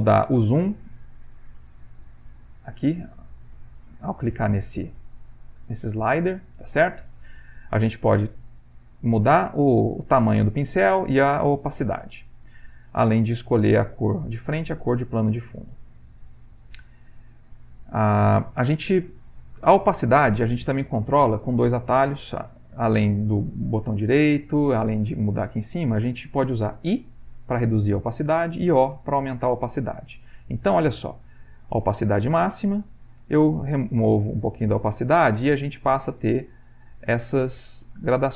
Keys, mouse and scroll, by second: 0.3 click, 1.1 click, 1.8 click, 3.0-7.3 drag, 8.3-10.6 drag, 11.0-12.3 drag, 18.5 click, 27.2 i, 29.3 o, 32.0-33.3 drag, 33.3 i, 36.1-38.3 drag.